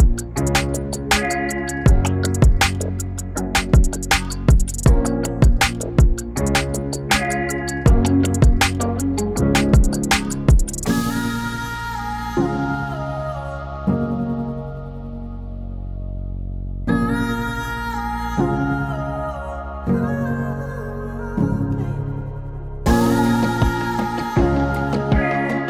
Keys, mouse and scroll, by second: 0.0 click, 1.1 ctrl+v, 1.5-2.8 drag, 2.8-4.6 drag, 4.6 ctrl+v, 5.3 click, 6.3 ctrl+v, 7.0 click, 7.9 ctrl+v, 8.7 click, 9.8 ctrl+v, 10.6 click, 11.7 ctrl+v, 12.8-15.0 drag, 15.0 ctrl+v, 15.9 click, 17.4 ctrl+v, 18.2 click, 19.0 click, 19.4 space.